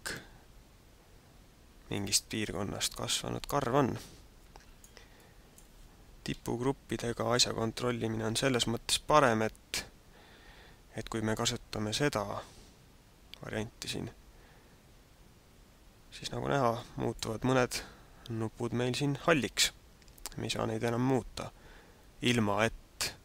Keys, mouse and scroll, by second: 2.4 middle click, 5.2 middle click, 6.2 KP_1, 16.7 click.